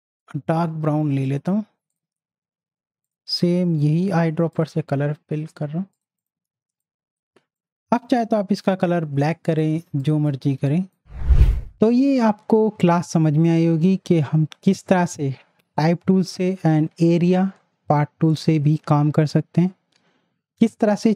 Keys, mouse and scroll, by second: 3.9 i, 4.5 click, 6.5 z, 6.8 click, 7.6-9.5 drag, 9.7 z, 10.0 click, 10.5 space, 10.7 click.